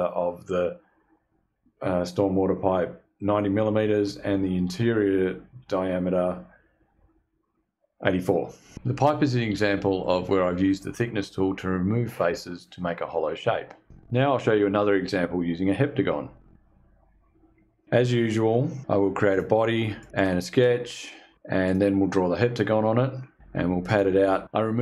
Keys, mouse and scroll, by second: 17.5 click, 18.0 click, 18.1 click, 18.2 click, 18.4 click, 18.6 click, 18.9 click, 19.4 click, 19.6 click, 19.9 click, 20.2 click, 20.4 click, 20.7 click, 21.0 click.